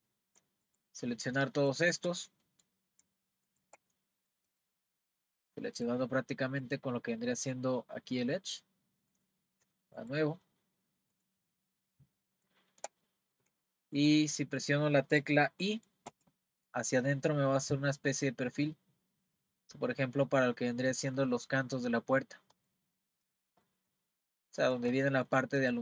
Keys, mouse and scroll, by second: 0.6 shift+click, 1.7 shift+click, 2.2-3.5 middle drag, 3.5 shift+click, 3.9 middle click, 4.5 click, 5.8 click, 6.6 click, 9.1 click, 10.0 shift+click, 11.1 shift+click, 12.4 shift+click, 13.0-16.1 middle drag, 23.3 click, 23.7-25.6 middle drag, 25.6 click.